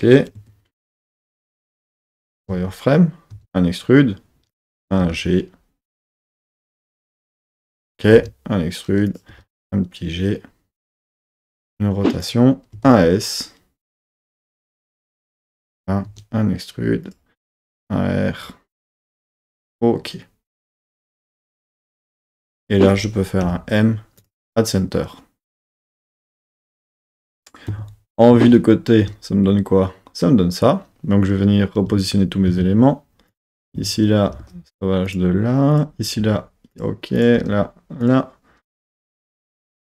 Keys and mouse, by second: 0.4 KP_1, 2.1 z, 3.3 e, 4.5 click, 5.0 g, 7.4 click, 8.2 e, 9.1 click, 9.3 g, 11.3 click, 11.4 r, 12.2 click, 12.8 s, 14.2 click, 14.5 g, 15.5 click, 16.1 e, 17.0 click, 17.5 s, 19.0 click, 19.3 z, 21.2 middle click, 21.6 middle click, 23.4 m, 27.7 KP_3, 28.3 z, 31.9 z, 32.5 1, 33.3 click, 33.6 z, 34.3 g, 34.4 g, 35.0 click, 35.7 click, 36.0 g, 37.2 click, 37.4 g, 38.0 click, 39.0 click, 39.2 g, 39.9 click.